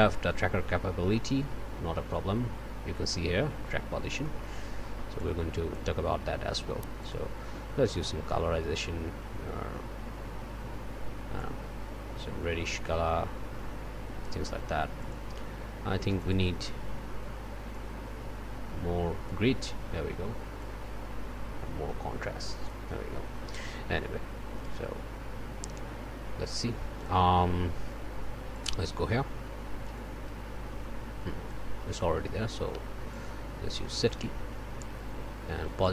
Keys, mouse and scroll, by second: 0.2-1.3 scroll up 2, 0.4 middle click, 3.9 scroll up 2, 4.2 click, 7.0 click, 7.9-14.5 drag, 15.0 click, 16.0 click, 17.7-19.5 drag, 20.6-22.9 drag, 29.9-31.7 drag, 33.1 right click, 34.0 click.